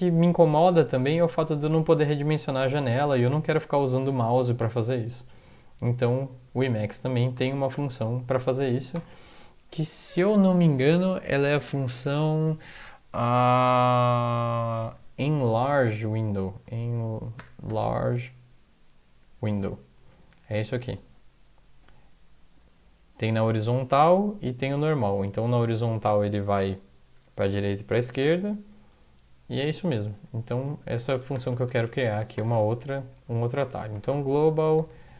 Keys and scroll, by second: 9.0 Return, 15.2-18.3 typing, 30.5 End, 31.3-32.5 typing, 33.1 Left, 33.6-35.1 typing, 34.8 Tab.